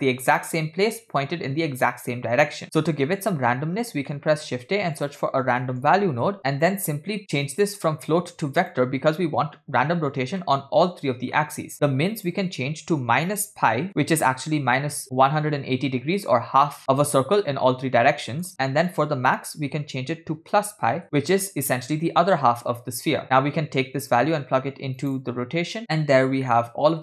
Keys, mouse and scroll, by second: 4.3 shift+middle click, 4.5 shift+a, 7.6-8.8 drag, 10.6 middle click, 11.4 middle click, 11.9-13.9 shift+drag, 18.3 middle click, 18.9-21.0 shift+drag, 23.2 middle click, 24.2-25.1 drag, 25.8 click, 26.7-27.0 middle drag.